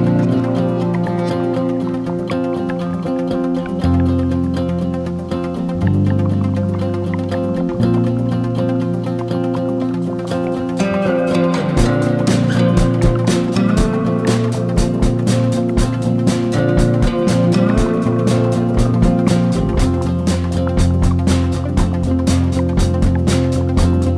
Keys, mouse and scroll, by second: 0.4 i, 1.6 middle click, 3.4 e, 5.6 middle click, 6.6 scroll up 1, 8.7 2, 9.0 alt+click, 9.7 alt+shift+click, 10.9 1, 13.6 right click, 14.3 right click, 15.0 right click, 16.5 scroll up 2, 17.8 right click, 19.4 scroll down 1, 19.8 middle click, 20.7 scroll up 1, 22.7 scroll down 1.